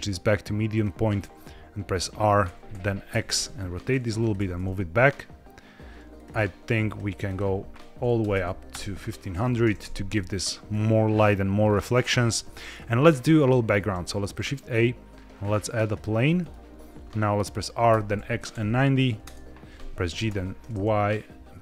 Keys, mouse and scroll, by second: 2.3 r, 2.6 u, 3.0 x, 4.1 click, 4.3 g, 4.5 y, 6.0 click, 6.8 click, 7.1-9.1 drag, 8.2 KP_0, 9.7 KP_1, 9.7 KP_2, 10.6-11.2 scroll up 2, 11.5-12.4 scroll down 2, 12.4 middle drag, 12.6-13.1 scroll down 2, 13.1 middle click, 13.7 shift+a, 16.3 middle click, 16.7 scroll up 1, 16.7 KP_5, 17.8 r, 18.0 x, 18.4 KP_9, 18.5 KP_0, 19.1 KP_Enter, 20.0 g, 20.2 y.